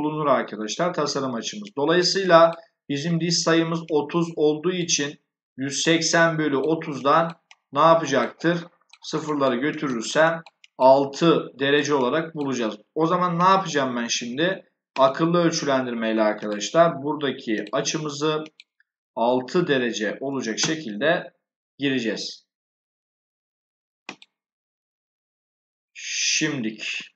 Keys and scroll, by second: 20.1 6, 20.4 Return.